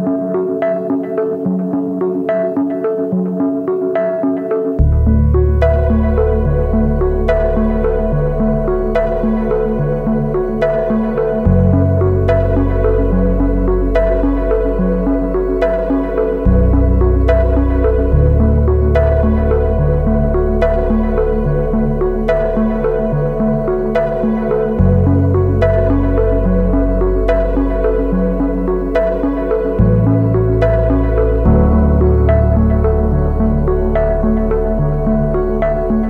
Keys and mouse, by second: 0.3 z, 0.8 b, 1.9-3.5 drag, 3.6 b, 5.3 ctrl+z, 5.6 ctrl+z, 6.0 shift+click, 6.5 z, 6.6 click, 8.0 KP_1, 8.8-9.1 shift+drag, 12.6 Tab, 12.9 shift+click, 13.2 shift+a, 17.0-18.3 drag, 19.0 Tab, 20.6 1, 21.1 s, 22.2 g, 23.1 z, 23.4 shift+click, 24.2 s, 25.4 shift+click, 25.6 s, 26.3 g, 30.3 shift+click, 30.7 Tab, 32.1 shift+click, 32.5 Tab, 33.0 a, 33.2 b, 34.7-36.0 shift+drag.